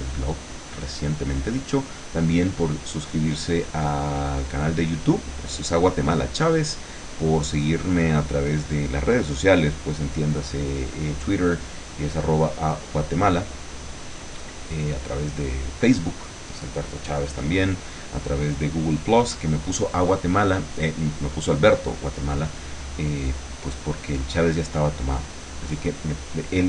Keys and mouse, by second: 0.9-5.3 drag, 5.8 click.